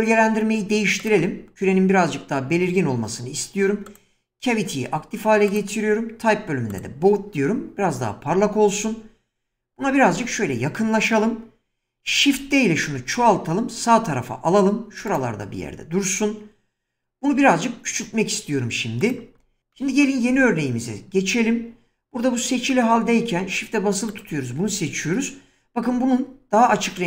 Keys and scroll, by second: 12.3 shift+d, 17.3 s, 25.8 <.